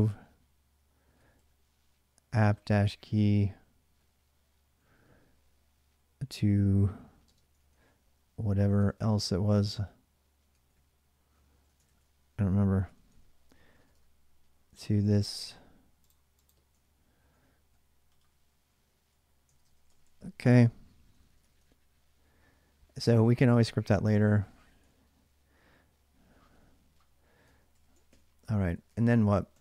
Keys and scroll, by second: 0.7-3.2 typing, 7.0 space, 7.4 ctrl+a, 7.5 ctrl+a, 10.3 ctrl+a, 11.1 ctrl+a, 11.3 ctrl+a, 11.6 ctrl+a, 12.6-14.1 typing, 16.8 ctrl+a, 17.0 ctrl+a, 19.2-21.6 typing, 23.9 ctrl+[, 23.9 k, 24.0 ctrl+j, 26.3-29.6 typing, 26.7 Return.